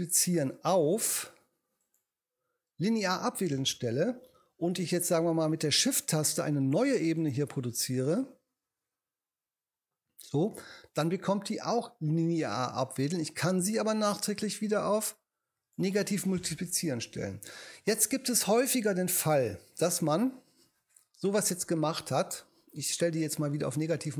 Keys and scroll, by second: 20.6 BackSpace.